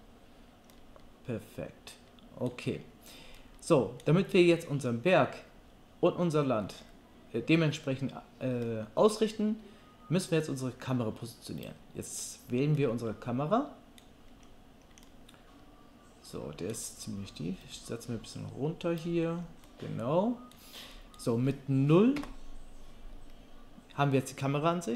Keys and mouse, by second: 11.6-17.6 middle drag, 17.6-24.9 drag, 22.2 KP_0.